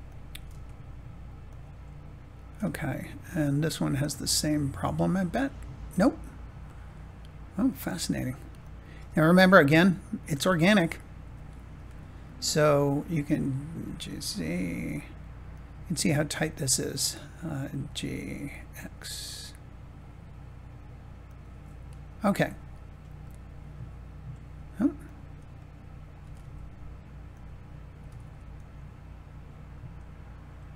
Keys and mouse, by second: 0.2 g, 0.4 z, 1.4-2.7 drag, 4.0 middle click, 5.2 middle click, 7.6 click, 8.0 Tab, 8.5 click, 10.1 click, 11.2 r, 11.7 y, 13.7 g, 14.0 z, 15.4 click, 16.5 click, 17.7 g, 18.7 x, 21.2 click, 23.2-24.2 middle drag, 25.5 middle click, 26.1 g, 26.3 z, 27.2 click, 27.9 g, 28.1 x.